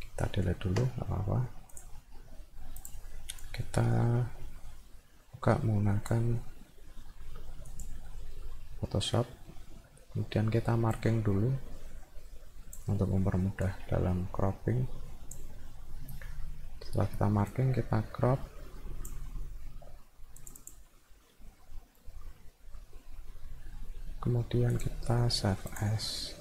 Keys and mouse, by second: 1.7 click, 2.8 click, 3.4-6.1 drag, 7.8 click, 10.9-12.8 drag, 13.7-15.3 drag, 17.5-19.1 drag, 20.4 click, 20.6 click, 24.8 click, 25.7 click.